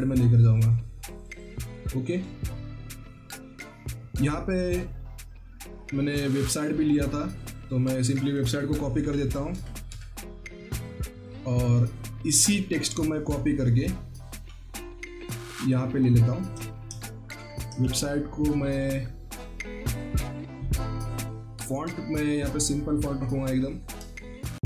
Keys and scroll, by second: 8.5 ctrl+c, 8.9 alt+Tab, 9.4 typing, 9.8 alt+Tab, 16.5 ctrl+a, 17.2 typing, 17.7 ctrl+a, 24.2 ctrl+t.